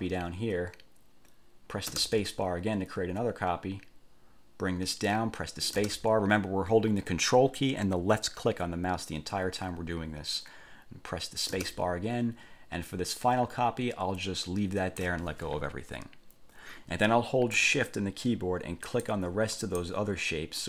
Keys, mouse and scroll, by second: 2.1 ctrl+space, 5.9 ctrl+space, 11.7 ctrl+space, 19.0 shift+click, 19.8 shift+click.